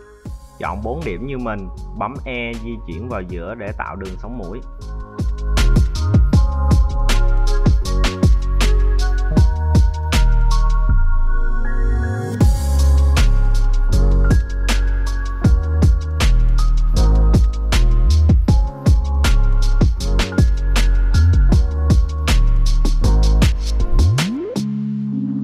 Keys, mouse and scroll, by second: 0.0 shift+right click, 0.4 shift+right click, 0.8 right click, 1.4 e, 5.2 click, 6.0 scroll up 4, 6.3 shift+middle click, 6.7 z, 7.6 right click, 8.4 g, 9.6 right click, 11.1 right click, 11.1 g, 12.6 g, 12.7 right click, 13.0 g, 15.1 `, 16.0 `, 17.3 ctrl+r, 18.4 ctrl+z, 19.3 ctrl+r, 20.5 z, 20.8 scroll down 2, 21.3-22.4 middle drag, 22.6 click, 24.2 c.